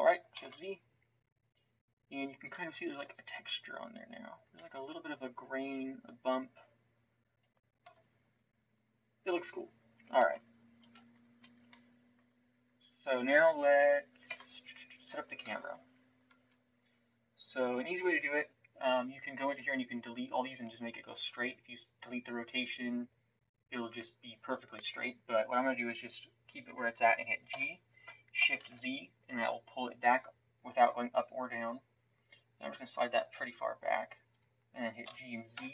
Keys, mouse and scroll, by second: 0.4 shift+z, 7.8 KP_5, 10.8 ctrl+s, 14.2 KP_0, 15.5 shift+z, 16.3 Tab, 16.7 right click, 27.5 g, 35.0 g.